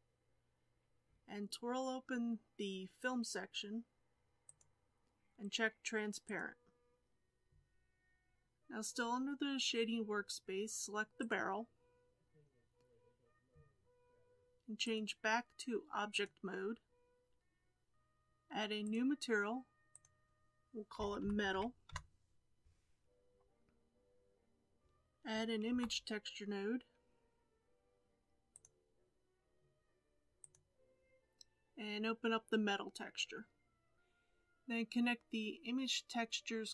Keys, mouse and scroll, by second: 6.2 click, 8.0-9.2 scroll up 3, 11.2 click, 18.9-33.9 drag.